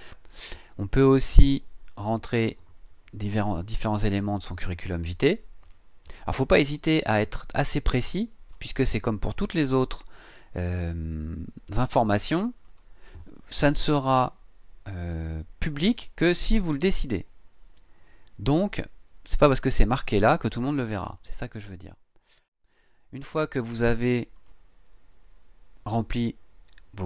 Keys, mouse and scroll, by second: 2.1 click, 11.7 scroll down 2, 12.6 click, 20.3 click, 21.1 click, 21.8 click, 24.4 click.